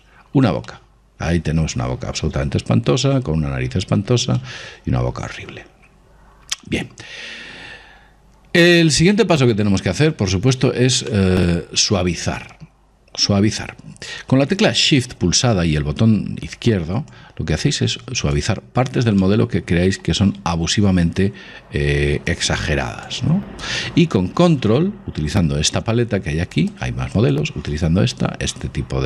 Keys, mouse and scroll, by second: 0.9-2.8 middle drag, 4.6-6.4 middle drag, 10.3-13.2 middle drag, 17.3 click, 19.4-22.5 middle drag, 22.5 click, 25.3-26.8 middle drag, 26.8 click.